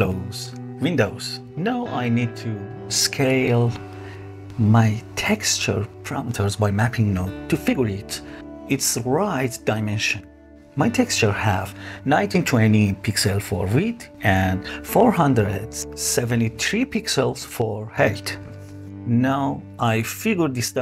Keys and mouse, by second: 2.0-4.1 drag, 4.8-9.7 drag.